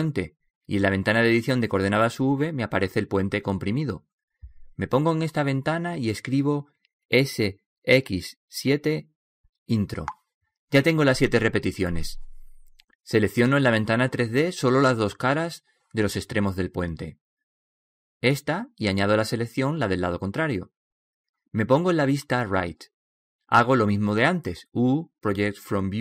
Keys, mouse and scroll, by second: 14.0-15.9 middle drag, 16.1 right click, 16.7 click, 17.8-20.5 middle drag, 20.5-21.2 scroll down 1, 23.6 right click, 24.9 KP_3.